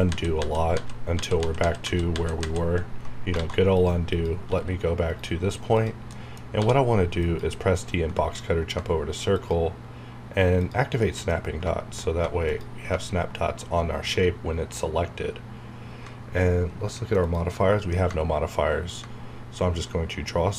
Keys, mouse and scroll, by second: 3.2 scroll down 1, 3.4 alt+a, 3.7 click, 4.5 g, 5.1 right click, 5.7 click, 6.1 middle click, 6.6 d, 7.2 click, 9.3 click, 11.0 middle click, 11.4 scroll up 1, 12.5 click, 17.2 click, 18.9-20.5 drag.